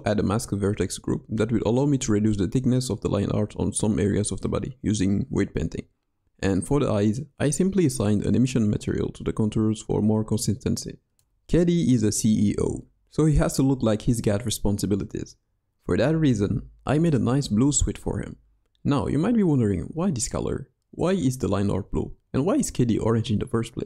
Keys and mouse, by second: 0.8-1.7 drag, 2.9-4.2 drag, 5.0 click, 5.6 click, 6.8 shift+middle click, 7.3 middle click, 9.3 middle click, 10.0 middle click, 10.6-12.0 middle drag, 12.0 KP_1, 12.5 shift+middle click, 13.0-14.1 middle drag, 14.6 middle click, 15.6-16.2 middle drag, 17.0-17.4 middle drag, 18.5 middle drag, 19.2 KP_3, 19.7 KP_1, 20.6 KP_3, 21.1-21.6 middle drag, 22.0-23.8 middle drag.